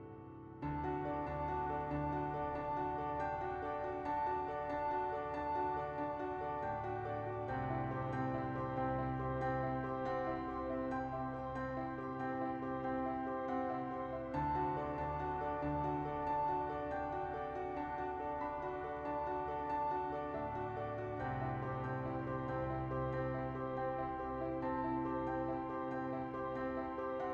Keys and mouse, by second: 0.1 click, 0.2 Tab, 0.9 middle click, 2.1 shift+d, 2.3 middle click, 2.8 p, 3.4 Tab, 5.4 Tab, 5.7 a, 5.9 middle click, 7.9 Tab, 8.6 middle click, 9.0 1, 9.6 1, 10.1 Tab, 10.5 1, 11.0 middle click, 11.6 KP_1, 12.0 Tab, 12.3 Tab, 12.7 Tab, 13.2 ctrl+2, 13.4 Tab, 13.6 middle click, 14.8 KP_7, 15.4 Tab, 17.0 KP_1, 17.3 ctrl+z, 17.3 s, 19.3 Tab, 19.8 a, 19.9 e, 21.0 z, 21.8 Tab, 22.2 middle click, 23.1 Tab, 23.5 Tab, 23.8 ctrl+a, 24.3 ctrl+a, 24.7 Tab, 26.8 click.